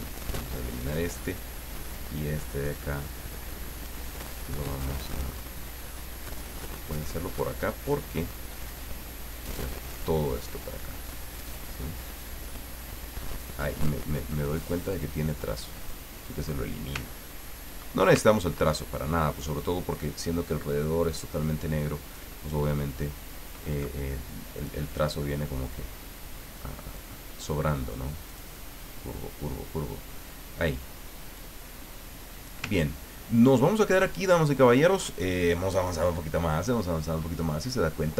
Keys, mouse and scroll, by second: 2.0-3.3 drag, 5.7-7.3 drag, 7.8-9.6 drag, 10.2-14.2 drag, 14.9 click, 15.8 click, 17.2-17.7 ctrl+scroll up 2, 18.3-18.7 ctrl+scroll down 2, 18.7 ctrl+middle click, 20.2-22.5 drag, 24.6 click, 25.7-27.4 drag, 28.3 click, 31.3-32.8 drag, 32.8-33.5 ctrl+scroll down 3, 33.6 ctrl+middle click.